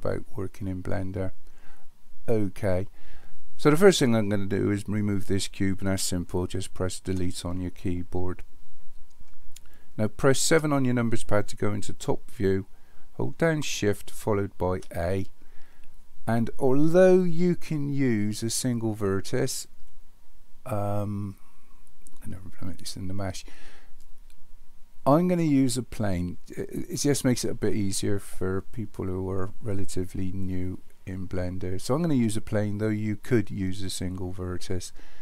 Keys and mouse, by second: 7.1 Delete, 10.5 KP_7, 14.7 shift+a.